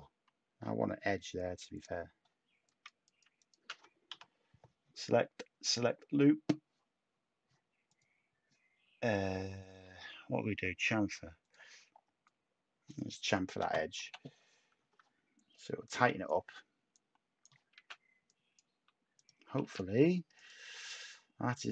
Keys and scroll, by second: 4.0 u, 14.0 /, 14.6 Tab, 17.7 a, 19.6 a.